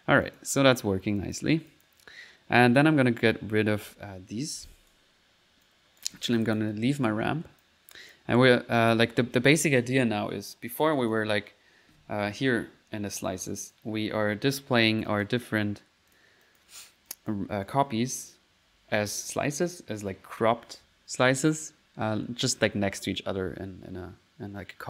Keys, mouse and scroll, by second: 0.3 click, 1.2 click, 1.7 click, 2.1 click, 2.3 middle click, 2.8-5.1 right drag, 5.7 right click, 6.1 Delete, 6.5 click, 6.9 middle click, 7.6-8.7 drag, 8.8 click, 11.0 click, 13.6 click, 15.1 click, 15.6 click, 15.6 middle click, 16.1-17.5 drag, 16.9 middle click, 17.7 click.